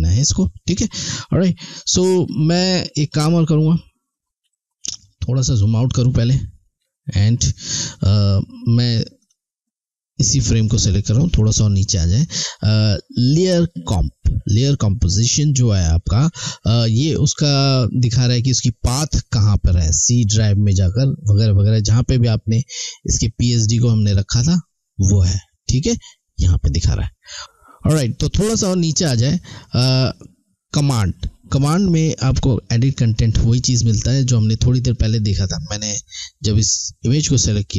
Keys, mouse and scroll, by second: 0.1 alt+scroll down 1, 0.7-1.1 alt+scroll down 1, 3.1 click, 4.8-5.6 scroll down 3, 5.9 alt+scroll up 1, 6.5 alt+scroll down 1, 9.2 click, 13.4 click, 35.8 click.